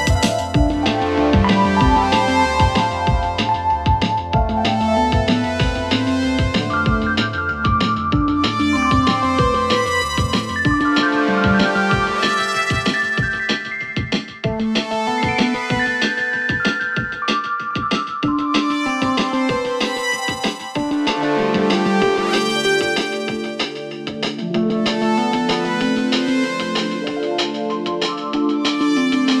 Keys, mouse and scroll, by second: 1.7 shift+s, 2.7 click, 5.5 ctrl+t, 7.3-16.5 alt+drag, 16.5 Return, 18.6 click, 24.3-27.7 alt+drag, 27.7 alt+shift+right click, 29.0 click.